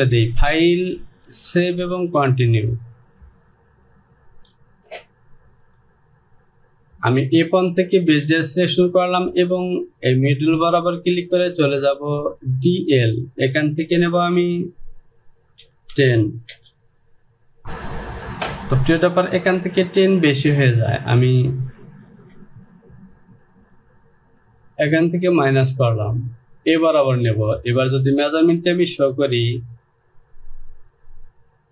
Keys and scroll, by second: 15.8 KP_1, 16.6 Return.